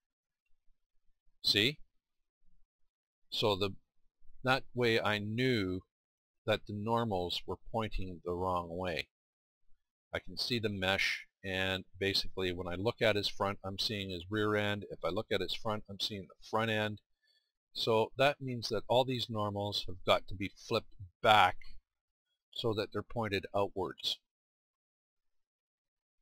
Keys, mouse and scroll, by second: 15.3-20.3 middle drag.